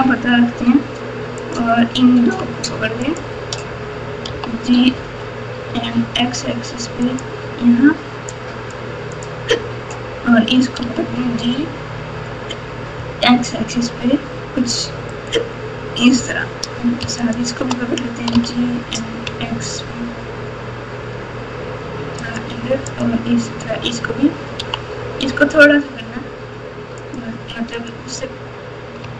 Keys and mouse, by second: 1.3 click, 4.2 g, 8.3 click, 9.1 click, 10.8 g, 17.2 shift+click, 18.3 g, 24.5 g.